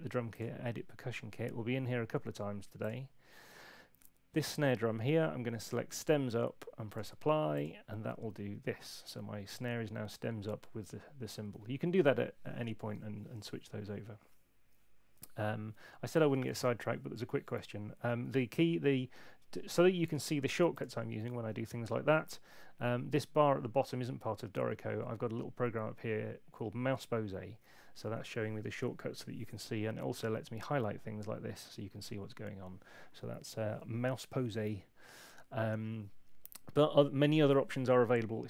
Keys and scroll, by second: 21.2 super+2, 30.2 F6.